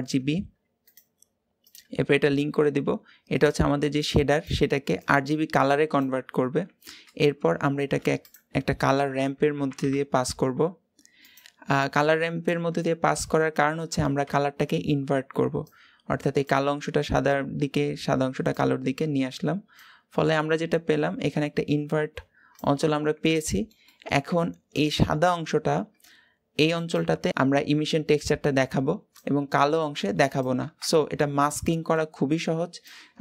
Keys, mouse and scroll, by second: 3.3-11.6 drag, 15.5-22.8 drag, 22.8 scroll down 1, 23.1-32.7 middle drag, 32.7-33.2 drag.